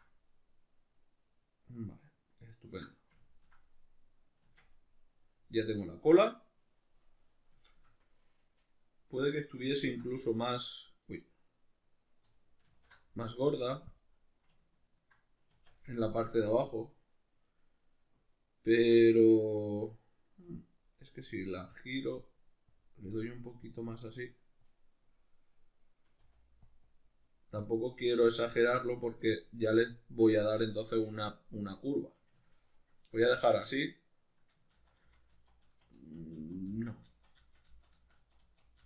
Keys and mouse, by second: 4.4 Tab, 12.7 alt+q, 15.5 Tab, 20.5-26.7 drag, 26.2 f, 32.5-38.8 ctrl+middle drag, 34.8 ctrl+z.